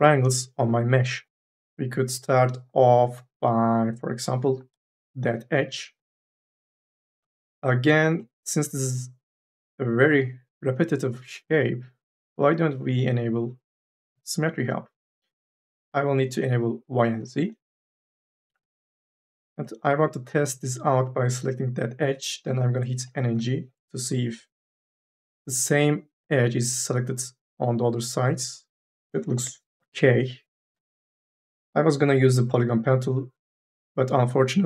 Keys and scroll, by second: 4.4 2, 4.7 e, 23.1 n, 23.4 g, 29.2 n, 29.5 b.